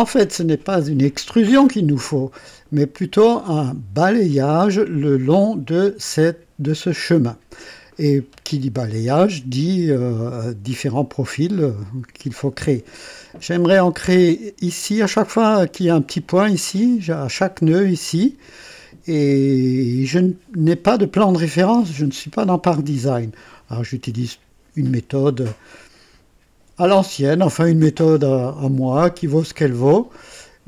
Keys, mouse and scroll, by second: 1.6 scroll up 1.